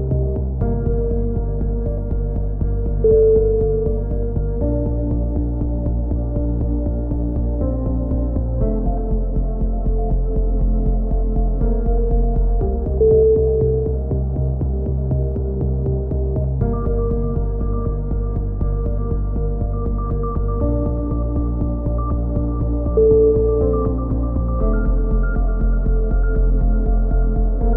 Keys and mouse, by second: 1.1-2.2 right drag, 1.8 s, 2.9 c, 4.4-5.4 right drag, 5.1 s, 7.3 a, 12.0-13.1 drag, 13.7-15.3 drag, 15.3 Tab, 15.6-16.6 drag, 20.8 KP_3, 21.7 Tab, 22.7 z, 24.0 click, 24.1 middle click.